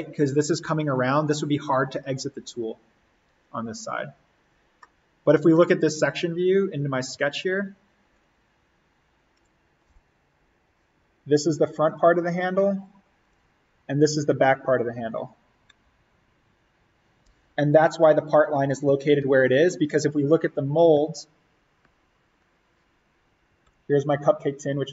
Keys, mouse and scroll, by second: 4.7 scroll up 1, 4.7-8.1 middle drag, 8.1 click, 22.0 click.